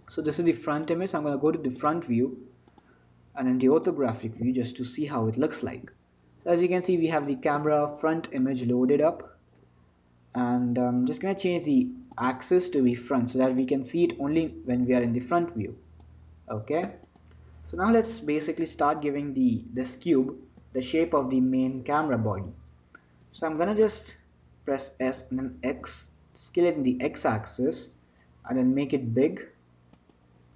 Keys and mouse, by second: 2.1 click, 4.0 click, 4.6 t, 5.2-7.7 middle drag, 12.3-19.4 drag, 20.8 Tab, 23.6 Tab, 25.2 s.